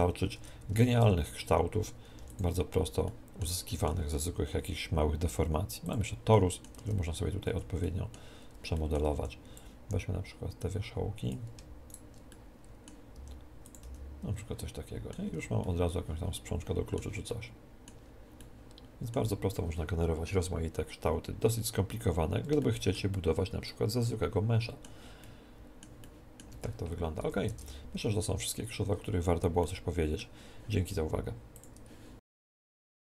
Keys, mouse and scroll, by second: 0.3 Tab, 0.3 click, 0.7 Tab, 1.0 z, 1.2 click, 2.1 x, 3.0-5.4 middle drag, 4.2 shift+a, 6.3-10.4 middle drag, 6.7 Tab, 7.4 a, 9.2 b, 11.8-13.1 right drag, 12.2-14.0 middle drag, 13.1 g, 13.8-15.5 drag, 13.8 z, 14.3-20.1 middle drag, 15.3 Tab, 22.1-28.0 middle drag, 26.4 Tab, 27.2 a, 27.4 Tab, 29.6-31.5 middle drag.